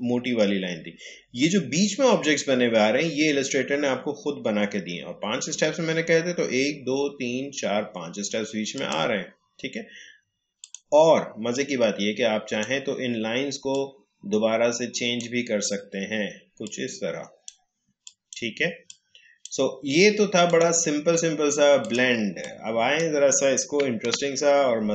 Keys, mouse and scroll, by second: 8.7-24.0 drag, 24.0 Delete.